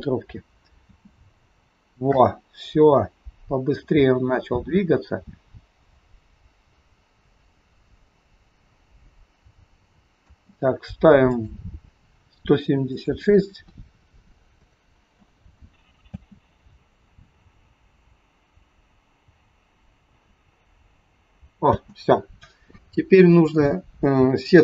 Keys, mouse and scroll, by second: 0.8 space, 10.3 space, 11.3 click, 12.9 click, 16.1 space, 21.8 space, 23.3 scroll up 1, 23.8 scroll down 1, 24.5 shift+middle click.